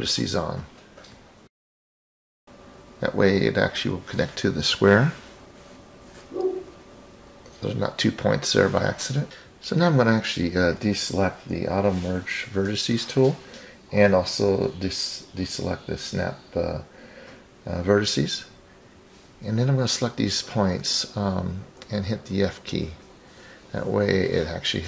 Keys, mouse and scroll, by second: 1.8 click, 3.4-4.9 drag, 10.1 click, 10.7-12.5 drag, 13.9 ctrl+click, 14.8 ctrl+click, 15.8 ctrl+click, 17.1 shift+click, 20.9 f.